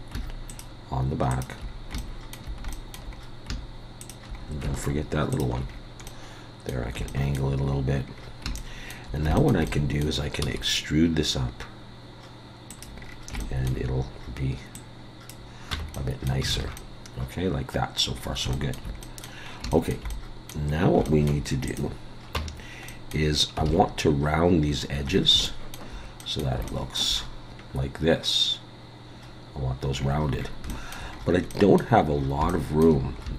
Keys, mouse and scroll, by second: 0.5 shift+click, 1.3 shift+click, 1.6-2.0 scroll down 2, 2.0 shift+middle click, 2.7 shift+middle click, 3.1-4.0 scroll up 2, 4.0 shift+click, 4.4 scroll up 3, 5.3 shift+click, 5.7-6.1 scroll down 3, 6.1 middle click, 7.1 shift+middle click, 7.6-8.3 scroll down 5, 8.6 shift+middle click, 9.4 shift+middle click, 9.6 middle click, 10.4 e, 13.0-13.4 scroll down 4, 13.4 shift+middle click, 14.7 click, 15.7 Tab, 15.9 middle click, 16.5 alt+a, 16.8 middle click, 18.2 scroll up 4, 18.5 shift+middle click, 19.0 middle click, 19.5 scroll up 2, 19.7 shift+middle click, 20.1 middle click, 20.7 scroll up 2, 21.0 shift+middle click, 21.7 click, 22.3 Tab, 22.9 middle click, 23.3 scroll up 2, 23.7 alt+a, 24.7-25.3 scroll down 9, 25.4 shift+middle click, 26.2 middle click, 26.7 shift+middle click, 27.3 scroll up 2, 29.9-30.7 scroll down 9, 30.7 shift+middle click, 31.1 scroll up 4, 31.5 middle click, 32.1 scroll up 4, 32.5 shift+middle click, 33.2 scroll up 2.